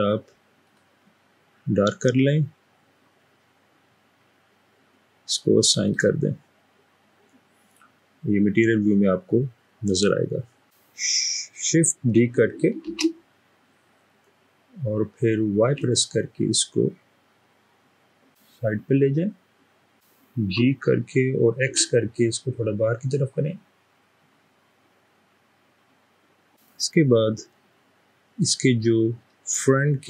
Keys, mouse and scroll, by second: 12.9 typing, 15.6 typing, 20.7 g, 21.7 typing, 26.9-28.5 middle drag.